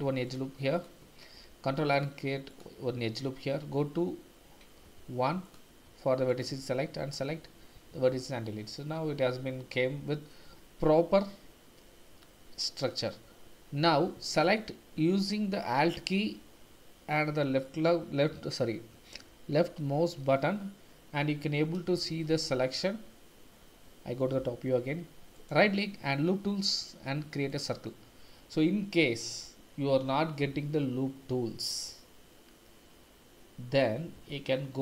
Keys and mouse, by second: 0.7 click, 1.3 ctrl+r, 2.5 click, 3.8 q, 5.9 1, 6.3 click, 7.4 x, 8.4 click, 8.5 middle click, 8.6 click, 8.8-10.3 middle drag, 14.3 alt+click, 22.1 shift+z, 22.6 1, 24.4 KP_7, 25.4-27.9 drag.